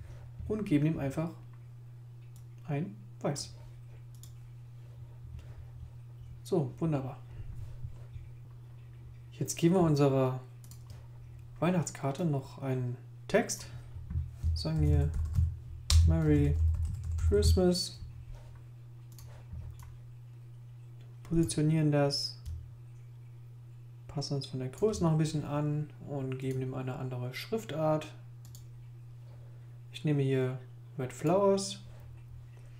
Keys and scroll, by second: 14.5-18.0 typing, 15.9 Return.